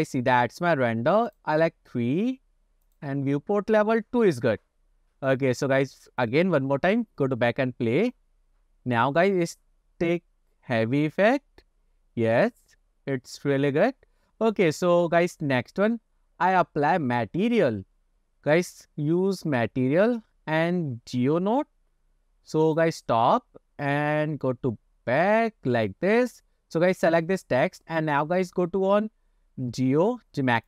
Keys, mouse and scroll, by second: 1.6 click, 3.0 click, 4.2 scroll down 1, 5.3-5.7 drag, 6.3 click, 22.9 click, 24.1-26.1 drag, 27.0 click.